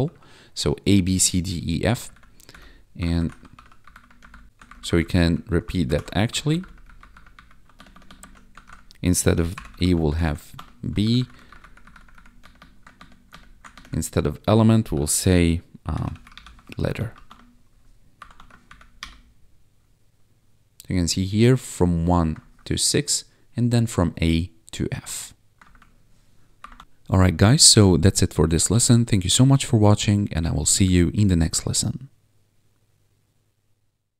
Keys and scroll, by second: 0.0 ctrl+s, 1.9 Down, 3.1 alt+shift+Down, 3.5 ctrl+s, 3.8 Up, 3.9 Left, 4.2 Down, 4.2 Left, 4.6 shift+Up, 4.8 shift+Up, 4.9 shift+Left, 5.8 alt+shift+Down, 6.3 ctrl+s, 6.5 Down, 6.6 Left, 7.0 Up, 7.1 Left, 7.3 Up, 7.7 ctrl+Right, 8.6 shift+Left, 9.5 b, 9.7 ctrl+s, 10.0 ctrl+Down, 10.5 Escape, 11.0 ctrl+Down, 11.3 Left, 11.5 Up, 11.6 Left, 11.8 Down, 11.9 Left, 12.4 Right, 12.9 ctrl+Right, 13.7 ctrl+shift+Right, 14.9 ctrl+d, 15.7-16.5 typing, 16.9 ctrl+s, 17.2 Escape, 18.3 ctrl+`, 18.6 Up, 19.0 Return, 22.5 1, 25.7 1, 26.7 ctrl+`.